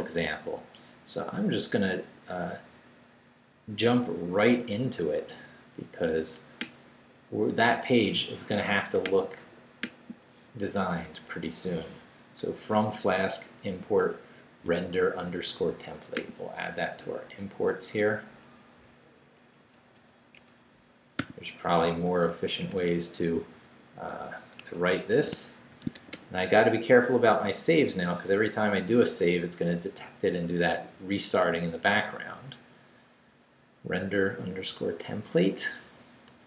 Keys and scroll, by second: 17.0 Down, 17.9 Up, 18.5 Up, 19.5 Up, 20.4 Up, 21.2 o, 21.8 super+o, 22.7 super+v, 24.6 Escape, 25.3 shift+Escape, 25.5-26.4 typing.